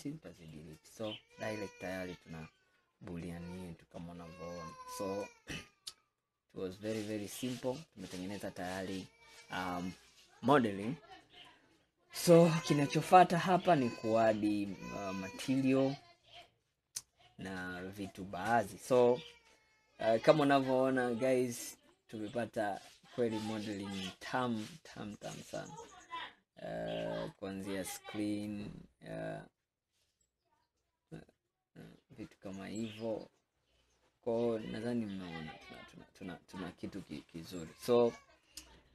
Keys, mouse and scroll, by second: 0.6-3.7 middle drag, 4.3 scroll down 2, 4.7-5.4 middle drag, 5.4-5.9 scroll down 3, 6.2-7.5 middle drag, 7.5 scroll down 4, 7.9-11.0 middle drag, 11.0 scroll down 4, 11.6-14.5 middle drag, 15.8-16.3 scroll down 3, 16.5-19.6 middle drag, 22.1 click, 22.7-25.7 middle drag, 27.7-28.8 middle drag, 28.8-29.9 scroll up 9, 30.1-33.1 middle drag, 36.2 scroll down 1, 36.6-37.7 middle drag, 37.7-38.1 scroll down 5, 38.5-38.9 middle drag.